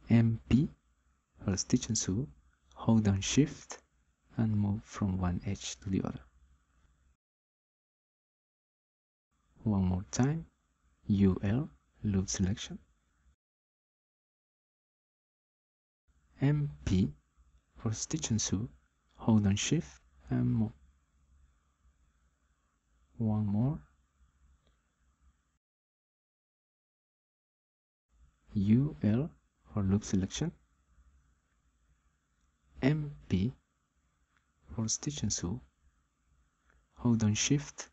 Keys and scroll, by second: 0.2 p, 11.8 u, 12.5 l, 16.8 m, 17.2 p, 28.5 u, 29.1 l, 34.5 m, 35.6 p.